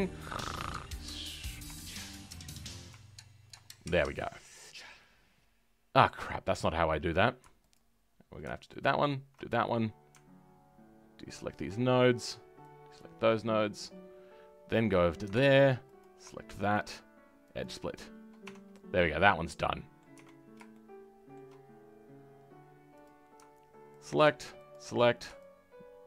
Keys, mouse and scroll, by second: 0.9 ctrl+click, 1.7-3.4 shift+middle drag, 3.4 ctrl+click, 3.6-4.0 scroll down 4, 4.0 middle click, 4.6-7.6 scroll up 2, 7.6 alt+click, 12.9 ctrl+click, 14.8-15.9 drag, 17.5 right click, 18.4 Tab, 19.1-20.1 middle drag, 20.1 Tab, 20.3-20.7 scroll up 1, 20.7 shift+middle click, 21.6-23.0 scroll up 1, 23.0-26.0 drag.